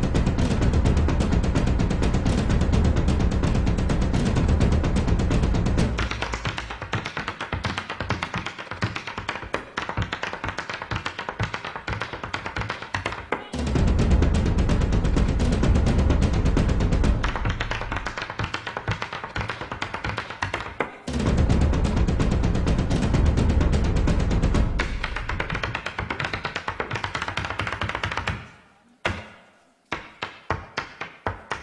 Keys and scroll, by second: 31.2 super+j.